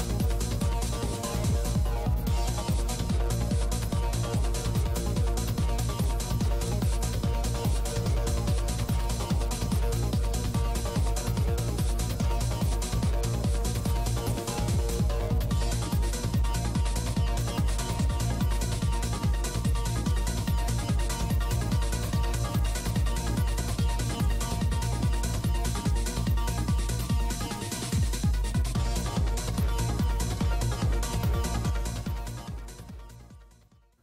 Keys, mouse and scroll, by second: 0.0 click, 0.3 f, 0.5 right click, 2.5 middle click, 3.2-4.3 drag, 3.2 right click, 4.3 middle click, 5.3 click, 7.7 f, 8.3-10.1 drag, 11.2 g, 11.3 f, 11.6-13.5 drag, 13.4 right click, 13.5 middle click, 14.1-16.6 typing, 17.1 click, 18.9 click, 20.9 click, 22.0 click, 23.7 click, 24.6 click, 25.6-26.7 drag, 26.7 p, 26.8 f, 27.2 click, 27.9 middle click, 28.5 g, 28.5 f, 28.8-30.1 drag, 29.8 middle click, 30.1 middle click, 31.2-32.2 middle drag, 32.1 p, 32.2 f, 32.8-34.0 drag.